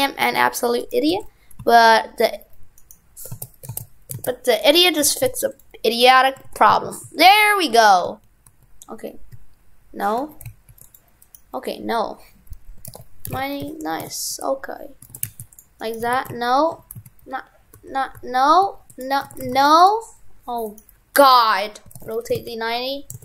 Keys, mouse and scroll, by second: 1.1 shift+f, 2.8 right click, 3.3 ctrl+z, 5.0 shift+f, 6.0 right click, 6.4 shift+f, 11.2 right click, 15.1 shift+f, 15.8 right click, 16.0 right click, 16.1 shift+f, 20.7 right click.